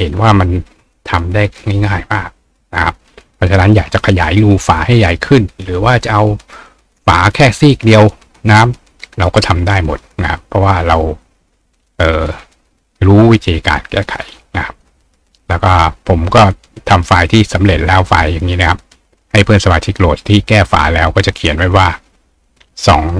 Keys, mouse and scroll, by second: 15.7 right click, 17.3 click.